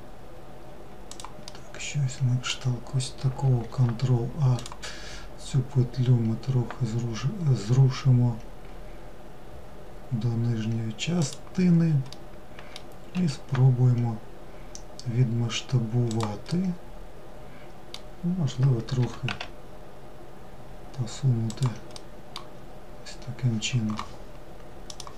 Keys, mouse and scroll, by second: 0.6-2.8 middle drag, 2.8 ctrl+r, 11.2-12.2 middle drag, 12.2 s, 15.6-18.1 middle drag, 18.1 g, 21.0-24.1 middle drag.